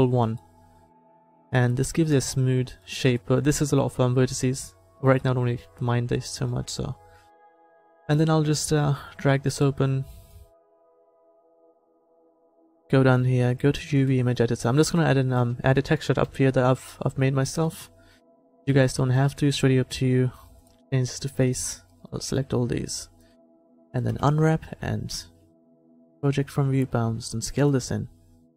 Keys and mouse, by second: 9.1-10.7 drag, 10.7 t, 16.3 KP_7, 17.7 Tab, 19.3 a, 21.4 c, 24.1 u, 27.1 s.